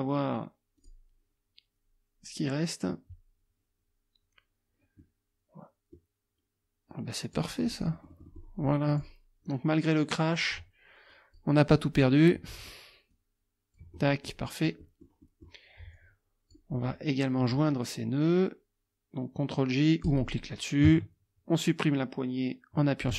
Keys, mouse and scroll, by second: 0.8 click, 5.0-6.1 drag, 7.3 click, 7.7 click, 8.9 click, 10.4 click, 11.1 click, 13.1 click, 14.0-15.6 drag, 15.9 click, 20.1 click.